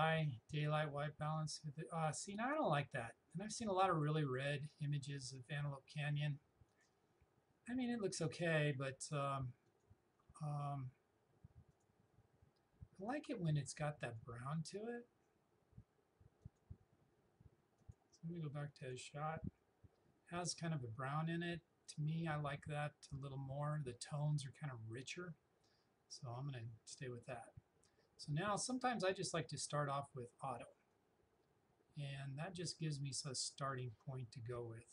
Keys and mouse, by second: 5.4 click, 9.7 click, 29.0-34.9 drag.